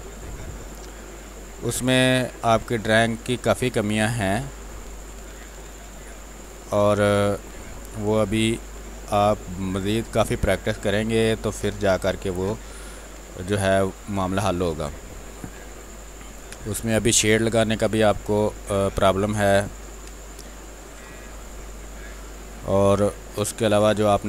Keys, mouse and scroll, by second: 0.9-4.8 drag, 4.8 space, 5.0 click, 5.3 space, 6.3-9.0 drag, 9.0 space, 9.1 click, 9.5 space, 10.4 click, 11.1 space, 13.4 click, 13.7 space, 15.0 click, 15.5 w, 15.9 click, 17.3 b, 18.5 click, 19.7 b, 20.0 space, 20.2 ctrl+click, 21.1 r, 21.4-23.0 drag, 23.0 b, 23.3 space, 23.6-24.2 ctrl+drag.